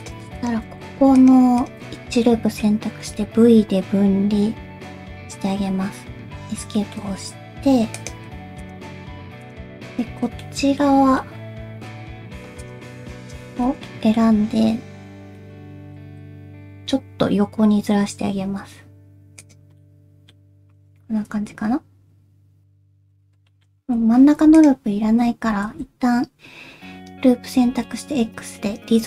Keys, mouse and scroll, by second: 0.0 click, 0.4 shift+click, 0.8 alt+z, 0.9 alt+z, 1.2 shift+click, 1.6 shift+click, 1.9 alt+z, 2.2 middle click, 3.0 v, 6.8 shift+middle click, 7.1-7.7 scroll up 1, 7.7 3, 8.0 click, 8.6 shift+click, 9.4 shift+click, 9.9 shift+click, 10.2 3, 10.4 middle click, 11.0 alt+z, 11.2 middle click, 12.6 shift+click, 13.2 shift+click, 13.7 alt+z, 13.8 alt+z, 13.8 middle click, 15.4 middle click, 15.9 g, 19.8 middle click, 22.6 scroll down 1, 23.5 shift+middle click, 24.0 2, 24.6 alt+click, 25.1 alt+z, 25.5 alt+z, 25.8 shift+middle click, 28.4 x.